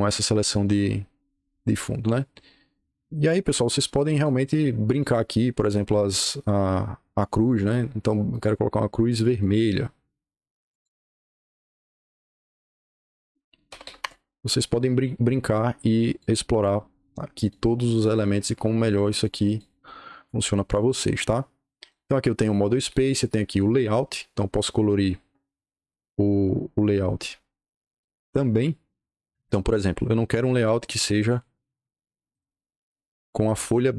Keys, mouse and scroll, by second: 0.6 click, 2.1-4.2 drag, 4.8 click, 7.4 click, 8.2 click, 9.3 click, 10.6 click, 13.3-14.3 typing, 16.0 click, 17.3 click, 17.9 click, 19.1 click, 21.7 click, 23.5 click, 26.3-26.6 scroll down 2, 27.9 click, 29.0-29.7 scroll up 2, 29.7-30.5 scroll down 2, 30.5 click, 31.1 click, 31.5 click, 32.3 click.